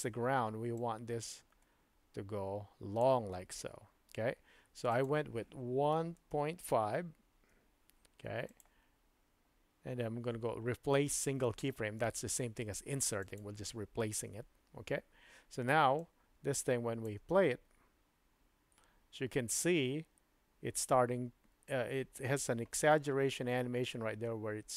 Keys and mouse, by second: 0.8-3.0 drag, 4.9-8.5 drag, 8.5-11.6 middle drag, 11.6 click, 11.6 right click, 16.0-17.1 drag, 17.2 space.